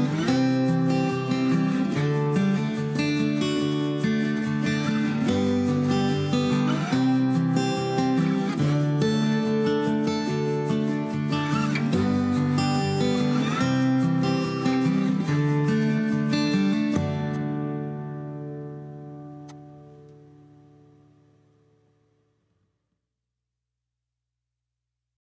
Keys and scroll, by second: 0.1-2.3 typing, 3.9-6.5 typing, 7.7 Return, 8.9 m, 17.0 i, 18.4 Escape, 19.1-21.0 typing.